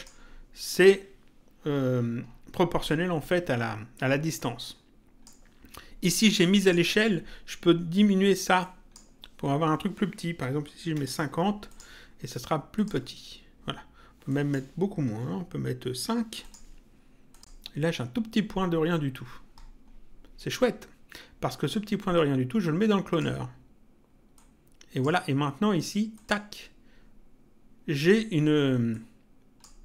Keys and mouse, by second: 4.4 click, 6.6 click, 8.6 click, 11.7 click, 14.3 click, 16.4 click, 22.1 click, 24.3 click, 26.1 click, 28.9 click.